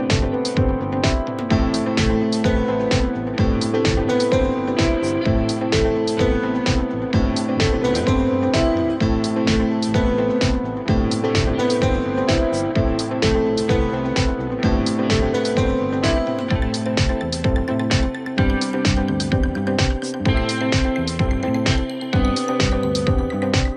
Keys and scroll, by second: 0.2 space, 2.7 l, 3.5 Escape, 5.5 F3, 5.7 Escape, 8.2 Escape, 10.4 Escape, 13.4 c, 14.6 shift+Page_Up, 18.2 shift+Page_Down.